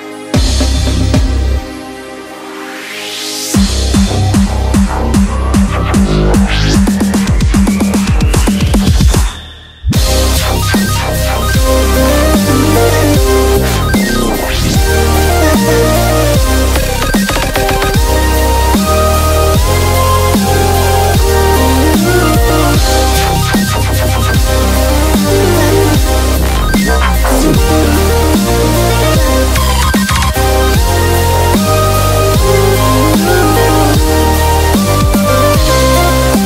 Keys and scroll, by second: 11.6 super+i, 12.6 b, 15.5-15.8 typing, 32.3-36.4 typing.